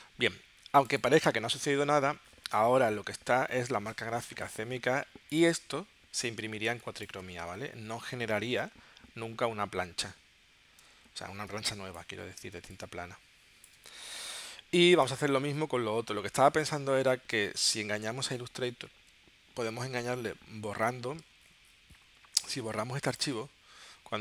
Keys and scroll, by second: 6.7 space, 11.6 alt+space, 12.6 alt+space, 18.2 super+Tab.